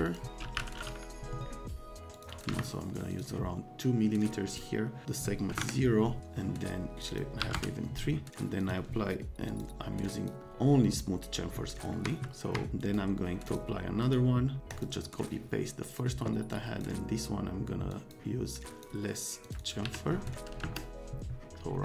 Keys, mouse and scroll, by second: 0.0 click, 0.1-1.0 typing, 2.1 click, 2.3 click, 2.4 1, 3.1 click, 4.6 scroll down 2, 5.5 KP_0, 5.6 KP_Enter, 6.9 middle click, 7.1 middle click, 7.4 KP_3, 7.6 KP_Enter, 8.6 middle click, 9.5 middle click, 10.1 middle click, 12.0 F3, 12.5 F3, 12.8 right click, 13.4 click, 14.0 right click, 14.7 click, 16.5 click, 17.9 click, 18.5 click, 19.5 click, 19.6 click, 19.8 1, 20.6 KP_Enter.